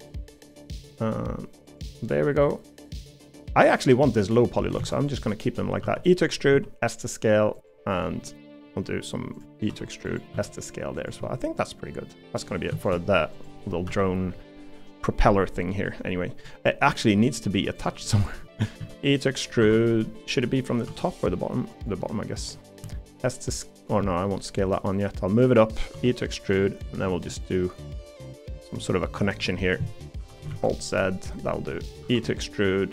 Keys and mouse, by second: 2.4-3.9 middle drag, 4.2 middle click, 4.8 alt+z, 5.8 e, 6.5 s, 8.2 middle click, 9.7 e, 10.3 s, 11.2 middle click, 12.2 middle click, 12.9-15.9 drag, 16.4 middle click, 17.1 middle click, 18.1 middle click, 18.8 d, 19.6 Escape, 20.8 e, 22.0 middle click, 22.8 s, 24.0 middle click, 24.6 middle click, 27.0-28.8 middle drag, 29.6 middle click, 30.1 KP_7, 30.5 alt+z, 32.0 e.